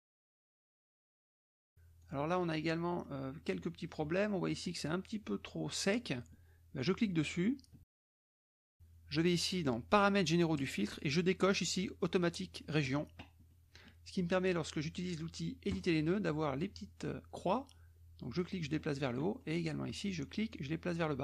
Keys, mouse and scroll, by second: 0.3 KP_Subtract, 1.2 middle click, 2.0 click, 2.9 click, 3.3 middle click, 4.0 middle click, 4.6 click, 6.8 click, 8.4 click, 10.5 click, 12.8 click, 13.5 click, 15.7 click, 17.5 click, 18.7 middle click, 20.5-21.2 drag.